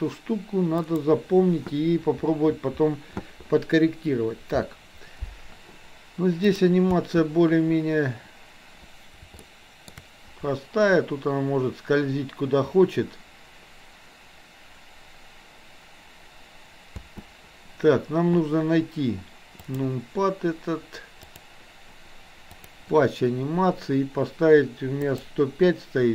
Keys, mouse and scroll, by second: 0.8 click, 6.9 space, 9.3-9.9 shift+middle drag, 16.9 space, 25.0-26.1 drag.